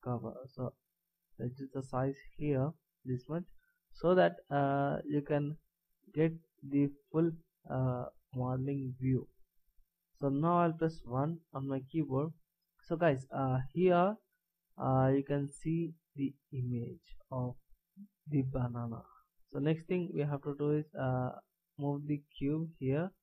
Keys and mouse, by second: 0.8 middle click, 11.0 KP_1, 12.5 click, 21.9-23.2 drag.